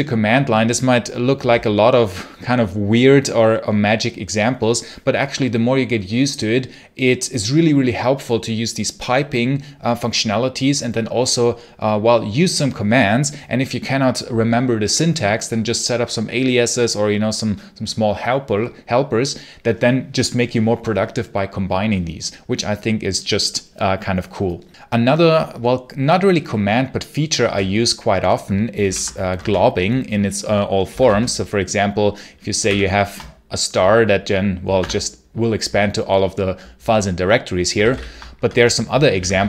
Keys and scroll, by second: 28.7 ctrl+l, 29.1 Return, 30.5-31.3 typing, 32.5 shift+8, 34.6 Tab, 37.6 ctrl+c, 37.7 ctrl+l, 38.2 Return, 38.8-39.4 typing.